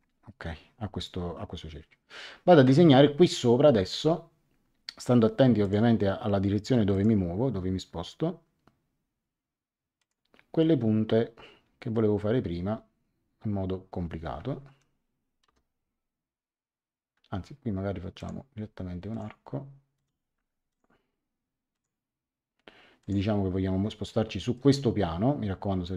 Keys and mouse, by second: 3.8 click, 5.6 click, 6.9 click, 9.9 click, 14.6 Escape, 15.4 l, 18.1 click, 21.7 click, 23.0 click, 24.0 middle click.